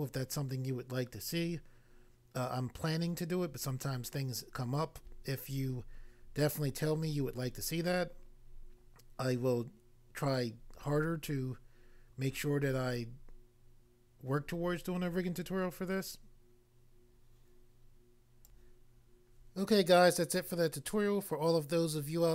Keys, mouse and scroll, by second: 18.4 click, 18.6 click.